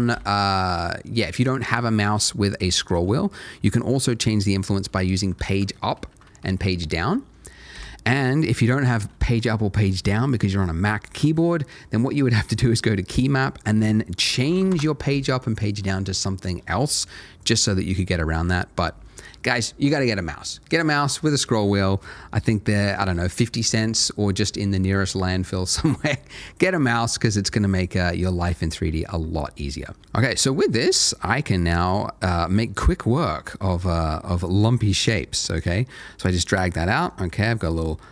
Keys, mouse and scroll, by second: 0.1 Escape, 1.6 g, 2.0-2.5 scroll down 1, 2.5 scroll up 1, 4.6 Page_Up, 4.9 Page_Up, 5.2 Page_Down, 5.3 Page_Down, 5.5 Page_Down, 5.6 Page_Down, 5.8 Page_Down, 5.9 Page_Down, 6.1 Page_Down, 6.2 Page_Up, 6.4 Page_Up, 6.6 Page_Up, 6.7 Page_Up, 6.9 Page_Up, 7.7 Escape, 9.7 click, 13.5 double click, 14.2 p, 14.3 a, 14.5 g, 14.5 e, 14.7 Return, 17.4 click, 31.1 middle click, 32.4 g, 34.4 click, 34.9 middle click, 36.6 Tab, 36.9 middle click, 37.2 Tab, 37.6 middle click.